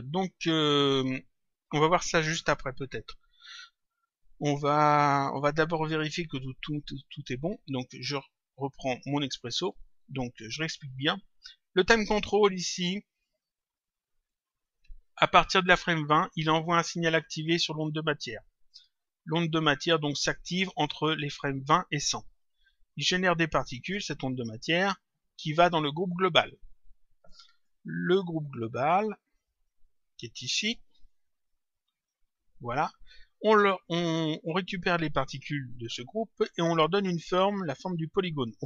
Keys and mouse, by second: 6.5 click, 7.9 click, 10.9 click, 13.5 click, 17.5 click, 20.0 click, 23.7 click, 27.5 click, 29.5 click, 32.0 click.